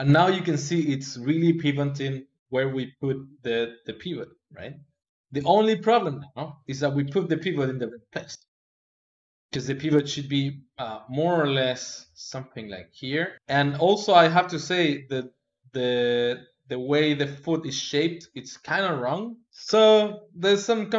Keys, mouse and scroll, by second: 4.4-6.6 ctrl+middle drag, 6.6-9.6 drag.